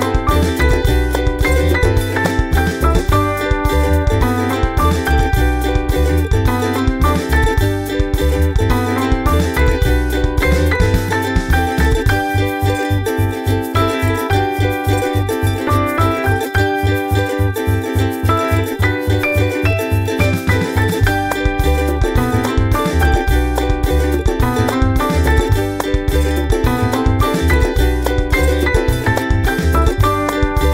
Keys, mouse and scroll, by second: 0.5 click, 0.7 scroll down 2, 2.1-2.5 scroll down 2, 2.8-3.3 scroll down 2, 3.6 scroll down 2, 4.0 click, 4.5 scroll down 1, 5.3 scroll down 1, 6.2 click, 6.7-9.4 ctrl+drag, 9.9 ctrl+click, 11.3-13.3 drag, 13.7 ctrl+scroll up 2, 14.6 ctrl+scroll down 2, 14.9 ctrl+click, 15.8 ctrl+z, 16.9 click, 17.1 click, 18.2 ctrl+scroll up 2, 19.5 click, 20.1-21.4 ctrl+drag, 21.5-23.3 ctrl+drag, 25.1 click, 25.3 click, 26.9 click, 27.3-29.1 typing, 29.4 click.